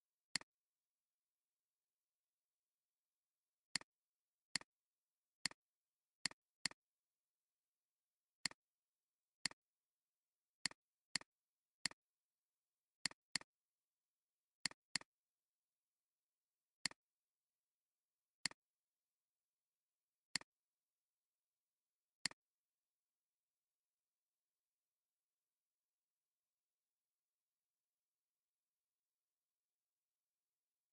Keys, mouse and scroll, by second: 0.3 right click, 2.1 alt+scroll down 1, 3.6 space, 4.0-5.1 alt+scroll down 5, 4.4 alt+space, 5.3 space, 5.7 alt+scroll down 2, 6.1 space, 7.2-8.4 alt+scroll down 1, 11.1 double click, 11.4 alt+scroll down 1, 11.8 alt+scroll, 11.9 alt+scroll down 1, 13.2 double click, 14.8 space, 14.9 double click, 15.3 space, 16.4 alt+scroll up 1, 16.7 space, 18.4 right click, 26.0 space.